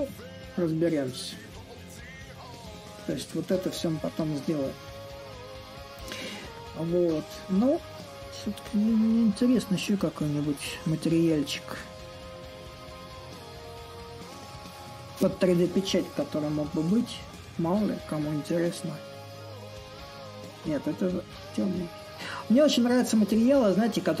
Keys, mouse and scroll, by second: 0.0-5.0 drag, 7.8-9.2 drag, 9.2-12.3 right drag, 12.3-17.3 drag, 19.2-24.2 drag.